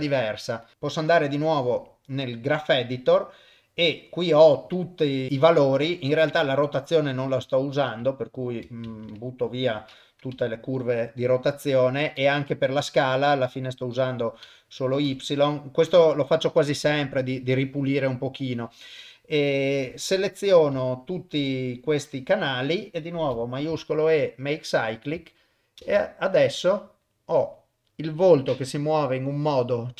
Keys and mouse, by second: 0.7 click, 2.9-4.8 middle drag, 6.4 click, 7.1 click, 7.5 middle click, 8.2 shift+click, 9.2 shift+click, 9.5 shift+click, 10.4 Delete, 13.6 click, 14.5 Delete, 14.9 click, 15.1 Delete, 15.4 middle click, 20.4 click, 21.3 shift+click, 21.7 shift+click, 23.7 shift+e, 25.8 shift+space.